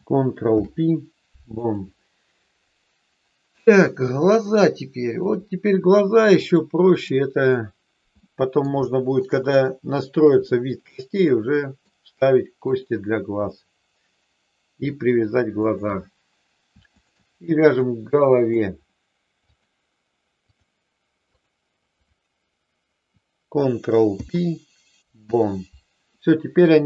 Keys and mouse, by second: 0.4 ctrl+p, 4.1-5.3 middle drag, 6.5 click, 8.1 middle click, 8.9 shift+middle click, 10.4-11.9 middle drag, 12.6 click, 13.5-14.7 middle drag, 15.6 shift+click, 16.9 shift+click, 17.7 middle click, 19.4-20.6 drag, 21.3-22.5 drag, 24.0 ctrl+p.